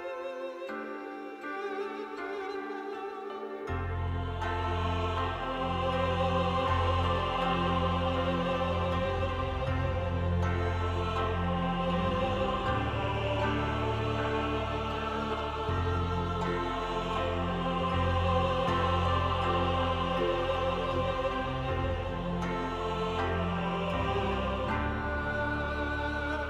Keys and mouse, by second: 0.8 shift+click, 1.7 shift+middle click, 2.3 shift+middle click, 2.7 click, 2.7 shift+middle click, 3.1 click, 3.5 shift+click, 4.1 click, 4.4 shift+click, 5.8 click, 6.2 click, 8.9 shift+click, 9.2 click, 10.7 middle click, 11.4 shift+middle click, 11.9 middle click, 12.3 shift+middle click, 12.8 middle click, 13.5 middle click, 13.8 middle click, 14.4 shift+click, 15.1 middle click, 16.0 shift+click, 16.7 click, 17.5 shift+click, 17.7 click, 20.1 shift+click, 20.7 click, 21.9 shift+click, 23.2 click, 23.8 KP_1, 24.6 shift+click, 24.9 click, 25.3 shift+click.